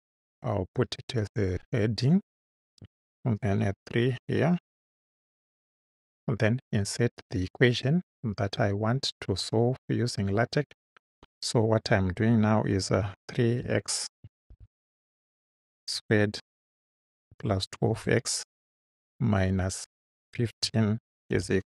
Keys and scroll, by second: 2.8 3, 5.0 ., 5.5 space, 13.0-15.4 typing, 16.6-18.8 typing, 20.4 1, 20.6 5, 21.3 =.